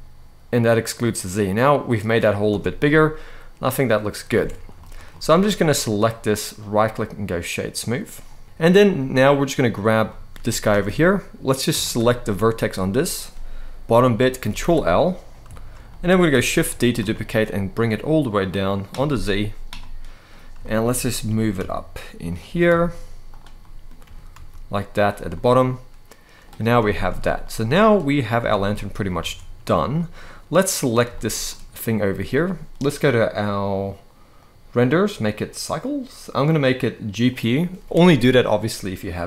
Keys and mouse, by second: 2.2 Tab, 2.5-3.7 middle drag, 4.0 alt+a, 4.5 shift+middle drag, 4.8 middle click, 6.3-7.6 right drag, 8.2-8.6 middle drag, 8.4 Tab, 8.4 alt+a, 8.4 z, 9.8 shift+middle click, 10.4 Tab, 11.5 shift+middle click, 12.4 click, 14.2 ctrl+l, 15.2 shift+middle click, 15.6 middle click, 16.3 shift+d, 16.7 z, 18.1 click, 18.8 shift+middle click, 19.7 middle click, 20.3 shift+middle click, 20.6 middle click, 21.0 g, 21.3 z, 22.0 click, 22.2 s, 22.4 z, 23.0 click, 23.3 middle click, 23.7 g, 24.0 z, 24.6 click, 25.0-26.1 middle drag, 26.6 shift+middle click, 27.1 middle click, 28.1 Tab, 28.4 shift+middle click, 28.9 alt+a, 29.6-30.0 middle drag, 30.4 click, 30.9 shift+middle click, 31.2 middle drag, 32.8 click, 34.1-35.1 drag, 36.1-37.2 drag.